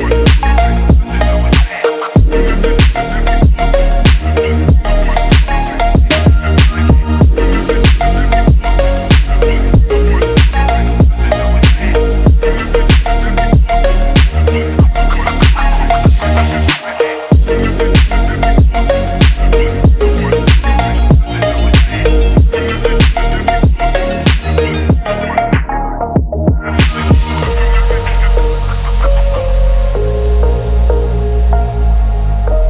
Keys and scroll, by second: 5.3 ctrl+z, 6.9 ctrl+z, 7.8 ctrl+z, 8.6 ctrl+z, 8.9 BackSpace, 10.2 BackSpace, 14.3 ctrl+z, 17.0 ctrl+z, 17.5 ctrl+z, 18.1 BackSpace, 23.2 Down, 26.0 ctrl+-, 28.6 ctrl+z, 29.2 ctrl+=, 30.4 Down, 30.6 Up, 31.1 ctrl+-.